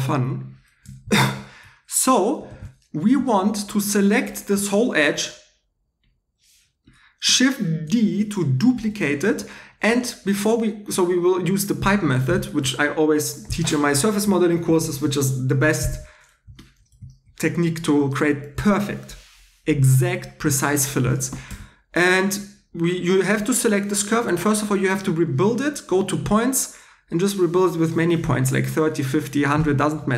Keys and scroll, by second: 1.0 shift+e, 2.5 shift+e, 3.1 shift+e, 3.4 shift+e, 8.0 shift+d, 21.5 2.